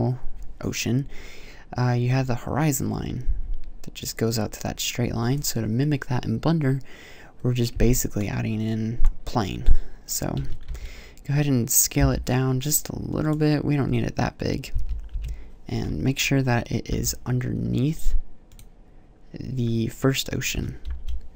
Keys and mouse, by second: 10.2 s, 13.1 click, 14.5 KP_3, 14.9 KP_5, 15.6 middle click, 16.7 g, 20.3 s.